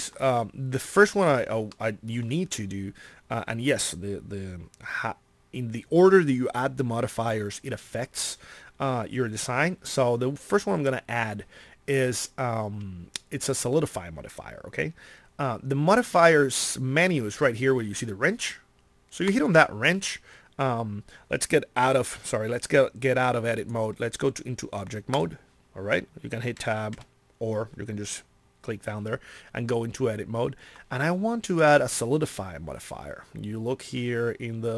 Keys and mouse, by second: 26.6 Tab, 26.9 Tab.